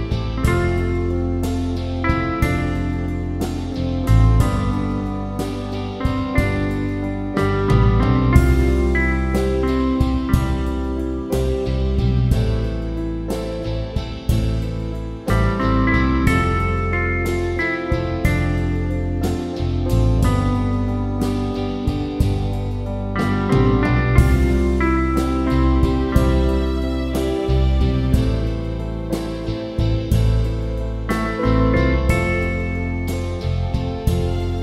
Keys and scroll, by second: 0.3 Return.